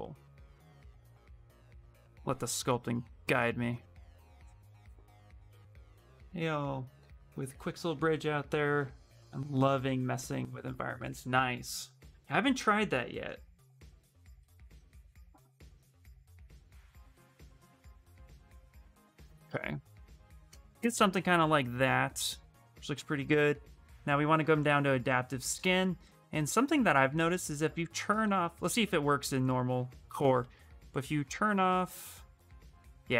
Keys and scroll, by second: 0.6 w, 1.8 q, 3.5 w, 21.1 a, 31.0 a, 31.3 a, 32.1 shift+f.